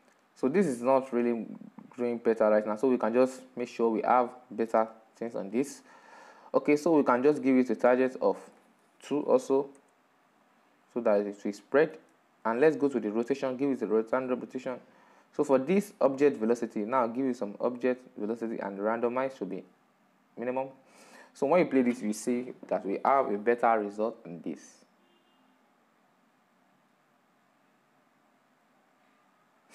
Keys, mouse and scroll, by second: 0.4 click, 1.2-2.5 middle drag, 2.5 right click, 10.1-14.2 drag, 17.7-25.0 drag.